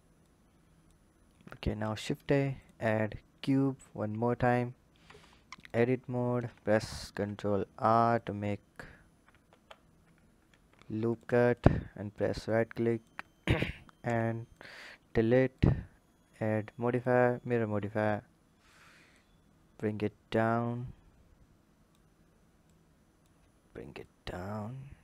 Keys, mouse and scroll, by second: 0.0 click, 0.4-1.5 drag, 1.5 a, 4.9 b, 5.4 click, 6.8 r, 9.2 z, 10.2 r, 12.2 shift+click, 15.3-18.4 drag, 18.5 click, 19.7 shift+click, 22.5 shift+click, 23.8 shift+click.